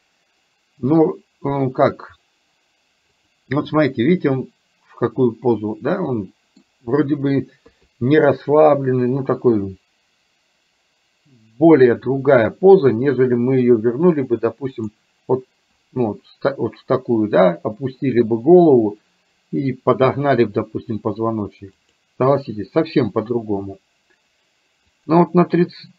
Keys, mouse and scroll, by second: 1.7 middle click, 3.8-6.7 middle drag, 7.7 KP_3, 14.8 click, 21.9 click, 25.0 click.